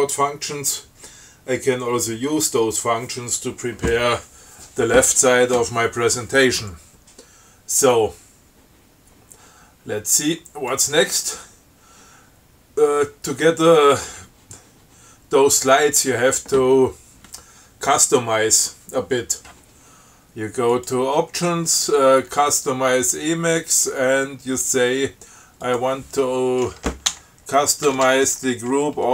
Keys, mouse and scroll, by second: 11.0 click, 21.0 click, 25.9 click, 27.4-29.1 typing.